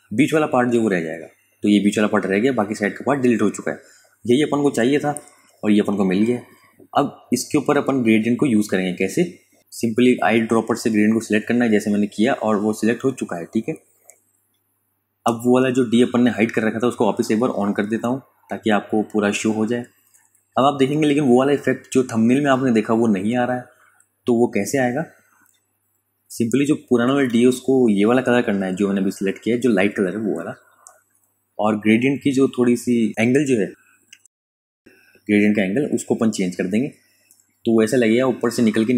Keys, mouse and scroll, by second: 0.7 click, 2.1 ctrl+KP_Subtract, 4.5 click, 8.8 click, 9.7 v, 10.1 ctrl+space, 10.3 ctrl+click, 10.7 ctrl+space, 11.1 click, 11.3 space, 12.6 click, 12.9 space, 13.1 click, 15.7 super+KP_Add, 18.5 super+KP_Subtract, 21.6 click, 24.0 i, 25.1 space, 25.3 click, 25.7 space, 27.0 click, 27.5 space, 27.7 click, 28.1 space, 28.6 v, 29.0 click.